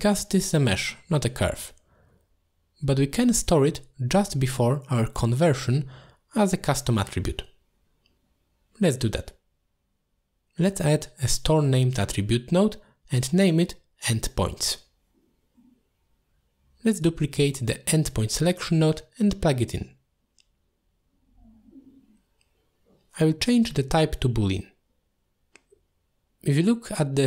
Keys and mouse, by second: 0.7 middle click, 1.1 click, 2.1 click, 2.3 g, 3.3 shift+click, 3.5 g, 4.4 click, 4.6 click, 5.0 click, 5.5 middle click, 6.0 click, 6.2 click, 7.0 click, 7.5 shift+a, 12.3-15.7 shift+drag, 16.2 middle click, 17.0 click, 17.3 shift+d, 19.1 middle click, 20.0 click, 20.2 click, 21.0 click, 21.3 click, 22.5-23.7 drag, 25.1 alt+shift+click, 25.9 middle click, 26.8 click.